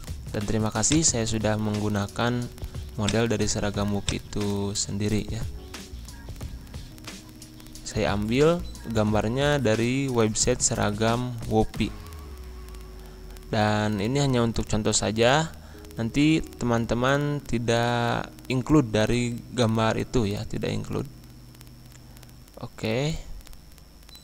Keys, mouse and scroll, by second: 0.9 click, 1.7 scroll down 1, 3.0 click, 4.4 scroll up 1, 7.4 click, 9.3 scroll down 1, 9.9-12.9 drag, 12.9 right click, 15.2 click, 18.5 click, 20.8 ctrl+v, 22.3-24.2 drag.